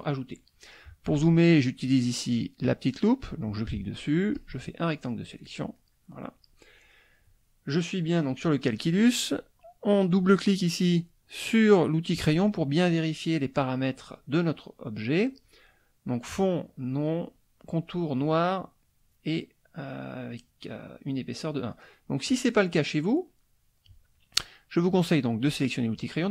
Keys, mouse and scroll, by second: 2.6 click, 3.4 click, 4.3-5.5 drag, 5.5 middle click, 10.2 click, 22.3 click, 25.0 click, 25.7 middle click.